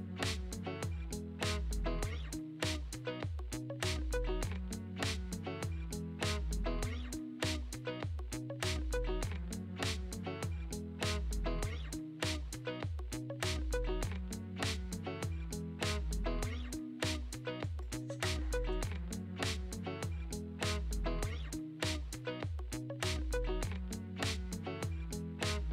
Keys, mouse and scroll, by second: 6.1-7.5 drag, 9.5-13.8 right drag, 14.0-15.2 scroll down 6, 15.2-17.1 shift+middle drag, 17.1 KP_1, 17.5 shift+middle click, 18.4-19.7 drag, 21.1 shift+click, 22.9 ctrl+l.